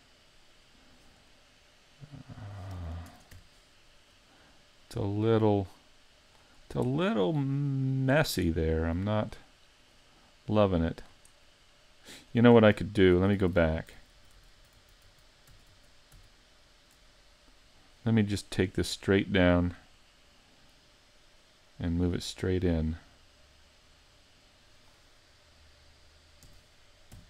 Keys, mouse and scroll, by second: 1.3 middle click, 3.1 ctrl+Tab, 4.0 right click, 4.8 click, 6.6-7.0 scroll up 3, 7.0 middle click, 8.8 click, 9.8 right click, 10.5 click, 11.4 middle click, 12.8 super+z, 13.2 super+z, 13.4 super+z, 13.6 super+z, 13.8 super+z, 14.0 super+z, 14.2 super+z, 14.4 super+z, 14.6 super+z, 14.8 super+z, 15.1 super+z, 15.5 super+z, 15.7 super+z, 16.2 z, 17.6-18.9 scroll down 1, 18.9 click, 18.9-19.3 scroll down 1, 20.1 middle click, 22.0 click, 23.3 click, 26.5 r.